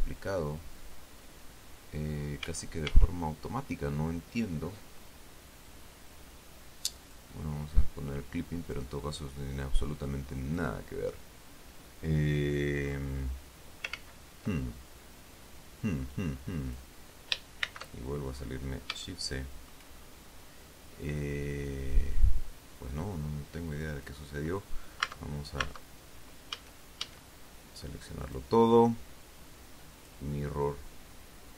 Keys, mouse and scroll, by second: 2.8 a, 7.4 click, 9.0-11.1 drag, 12.4-13.0 scroll down 1, 13.3-13.7 scroll up 1, 13.9-14.2 scroll down 1, 14.3 ctrl+z, 15.3 scroll up 2, 16.5 click, 18.0 shift+c, 18.6-19.3 shift+scroll up 3, 19.4 shift+middle click, 20.3-20.9 shift+scroll up 1, 24.3 click, 25.4 Tab, 26.9 a, 28.6 click, 30.3 click.